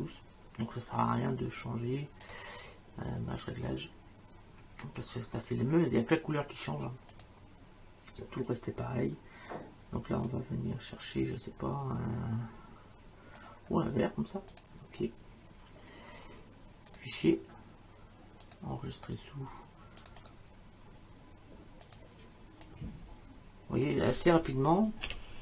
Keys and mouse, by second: 2.3 click, 7.1 click, 10.3 click, 14.5 click, 16.9 click, 18.5 click, 20.0 click, 21.9 click, 24.8-25.4 typing.